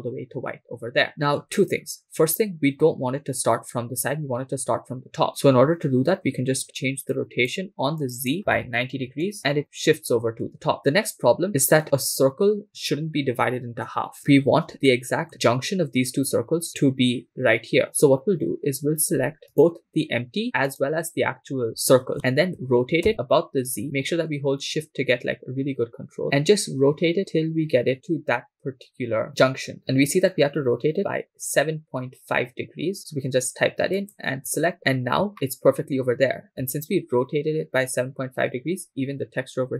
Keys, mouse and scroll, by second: 7.1-9.3 drag, 14.2-14.7 scroll up 4, 15.0-15.3 shift+middle drag, 15.4-17.0 scroll up 1, 17.8 scroll down 2, 19.7 right click, 20.8 shift+right click, 22.6 r, 23.1 z, 25.5-29.5 shift+middle drag, 34.1 shift+click, 34.8-35.2 scroll up 4, 35.3 shift+middle click.